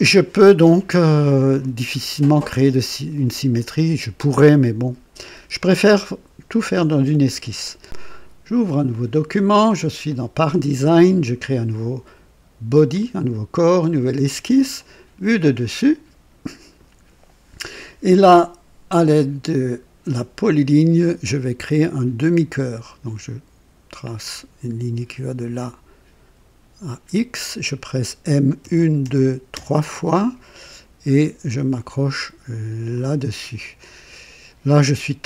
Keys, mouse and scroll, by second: 2.3-5.5 drag, 8.9 click, 13.0 click, 13.8 click, 14.8 click, 15.6 click, 20.4 click, 22.8 click, 26.8 click, 28.6-29.5 typing, 32.9 click.